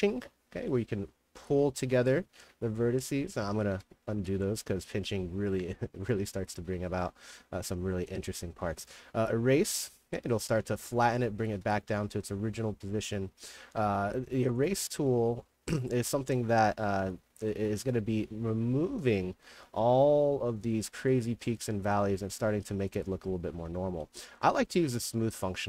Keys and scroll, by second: 1.9 ctrl+z, 3.8 ctrl+z, 10.9-12.2 typing, 17.3 a, 21.2 d.